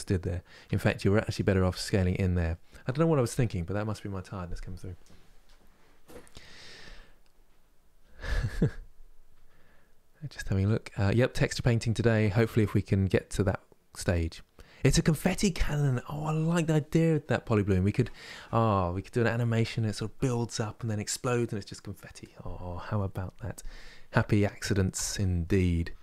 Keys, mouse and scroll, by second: 0.3 s, 19.0-22.0 middle drag.